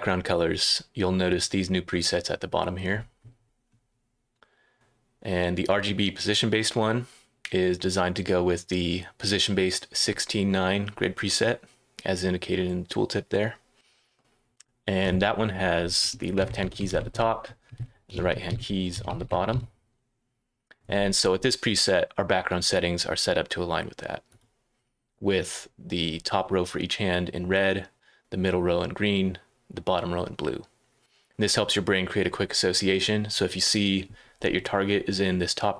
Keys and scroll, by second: 15.9-19.4 typing, 22.3 typing, 24.4 typing.